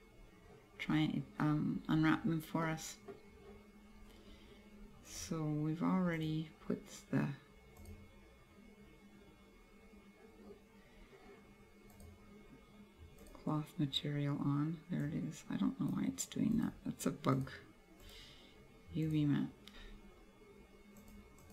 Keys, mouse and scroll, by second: 1.0-1.6 scroll down 5, 2.0 scroll up 2, 2.8 middle click, 4.0 scroll down 2, 5.2 click, 7.9 click, 11.0 scroll down 2, 12.1 click, 13.3 click, 15.1 click, 16.6 click, 18.1 click, 19.9 scroll up 2, 21.0 click.